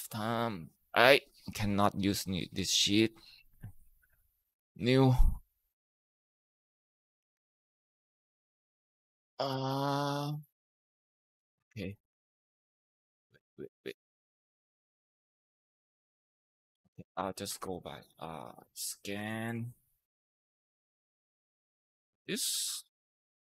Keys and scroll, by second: 7.2 ctrl+v, 8.9 ctrl+Right, 9.5 Right, 9.9 =, 11.4 Escape, 12.8 ctrl+z, 14.9 ctrl+v, 16.6 Up, 16.7 Up, 16.9 Up, 17.0 Left, 17.3 Left, 17.5 Left, 17.8-19.9 typing, 21.0 Tab.